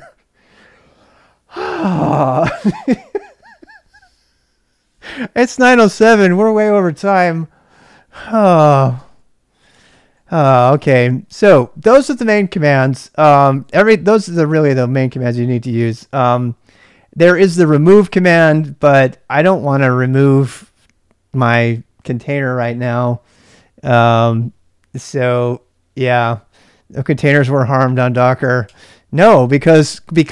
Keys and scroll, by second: 13.4-15.1 typing, 28.7 Return.